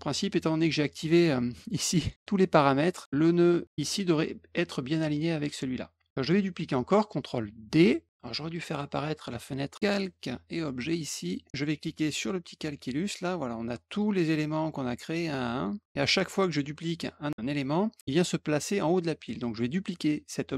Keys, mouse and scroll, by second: 2.0 click, 2.9 click, 8.6 click, 9.7 click, 10.2 click, 12.1 click, 13.8 click, 14.6 click, 15.0 click, 15.5 click, 15.8 click.